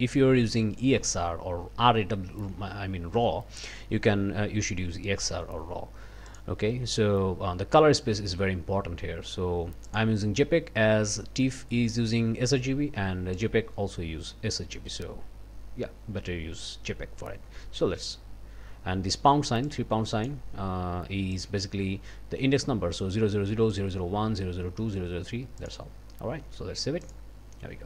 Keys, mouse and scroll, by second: 6.3 click, 9.9 click, 13.3 click, 19.7 click, 21.3 click, 25.6 click, 27.0-27.8 drag.